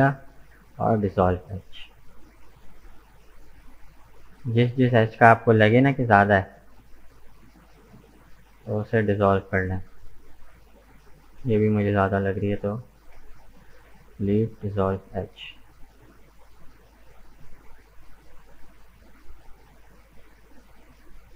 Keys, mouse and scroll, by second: 1.5 right click, 1.9 scroll up 2, 2.3-5.4 middle drag, 7.2 right click, 7.7 shift+right click, 8.1 shift+right click, 8.5 shift+right click, 8.9-9.9 middle drag, 9.9 shift+right click, 10.6 shift+right click, 11.1 shift+right click, 11.5 scroll down 1, 11.7-13.0 middle drag, 13.0 Delete, 14.5-17.6 middle drag, 18.3-20.9 middle drag, 20.9-21.3 scroll up 2.